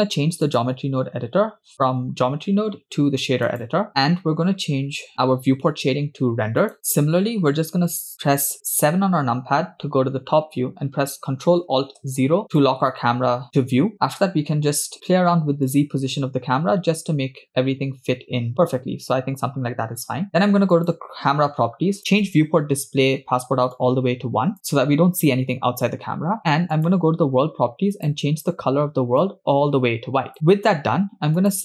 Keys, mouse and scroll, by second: 0.5-3.7 drag, 4.0 middle click, 6.8 scroll down 3, 9.0 KP_7, 12.2 ctrl+alt+KP_0, 12.5 click, 15.7-20.1 drag, 20.7 click, 22.0 click, 22.7-23.7 scroll down 4, 23.7 click, 26.7 click, 27.9 click, 31.4 click.